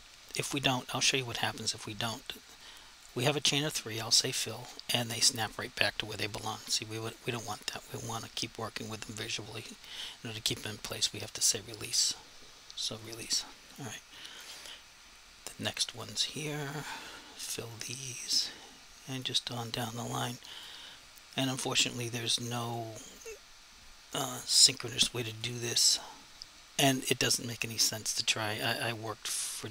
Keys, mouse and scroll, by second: 7.0 click, 8.1 click, 13.0 click.